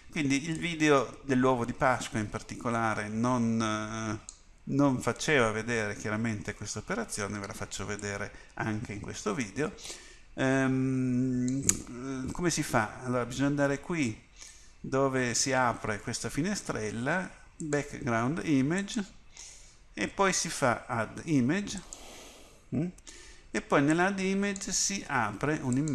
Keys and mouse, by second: 0.6-17.6 drag.